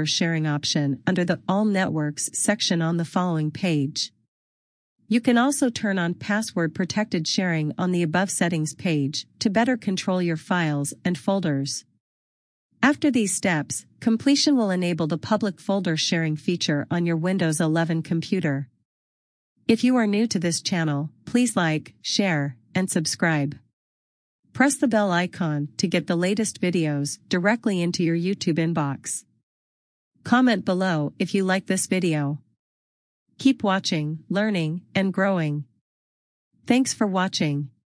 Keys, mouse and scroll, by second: 5.7 scroll down 1, 6.7-7.6 scroll up 1, 8.9 click, 9.8-10.1 scroll down 1, 13.3 click, 23.4 click, 25.9 click.